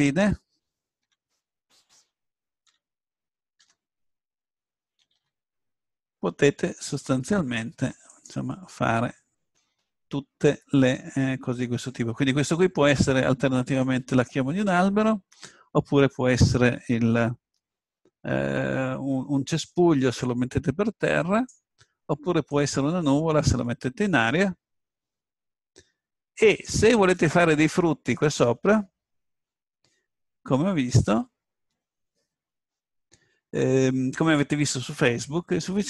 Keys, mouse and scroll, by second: 0.0-2.8 right drag, 2.8 Tab, 2.8 click, 2.8 l, 3.3 right click, 3.6 s, 8.2-12.0 drag, 20.2-22.6 drag.